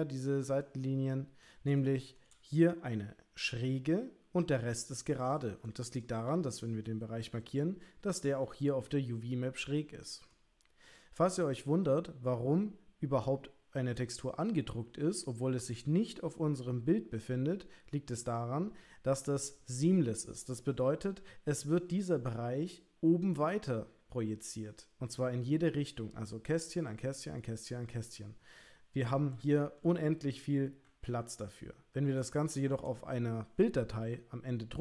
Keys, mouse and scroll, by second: 0.6 ctrl+middle click, 1.7 shift+scroll up 1, 1.9 shift+middle click, 6.3 l, 8.4 l, 10.4 shift+click, 32.5 shift+click.